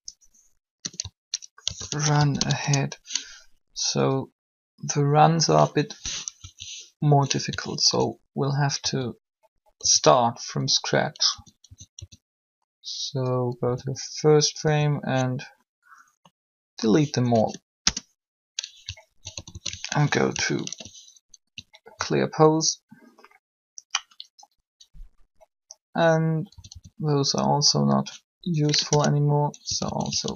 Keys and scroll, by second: 0.8-2.5 typing, 2.5 Return, 6.1 3, 8.8 a, 11.3 a, 11.6 a, 12.0 a, 13.6 a, 17.4 Delete, 17.7 Return, 19.3 alt+shift+a, 19.9 alt+shift+a, 19.9 alt+r, 20.6 alt+g, 26.5 a, 26.6 a, 28.8 Delete, 28.9 Return, 29.5 typing, 30.2 alt+r.